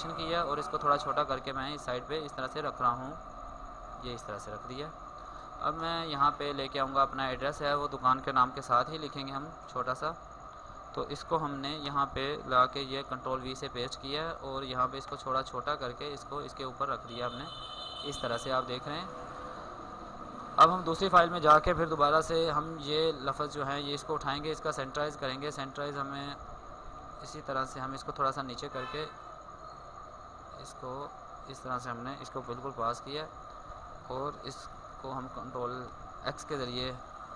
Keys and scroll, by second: 10.9 ctrl+x, 11.2 ctrl+Tab, 12.1 ctrl+v, 13.2 ctrl+t, 19.9 ctrl+Tab, 22.8 ctrl+Tab, 31.8 ctrl+d, 34.1 ctrl+x.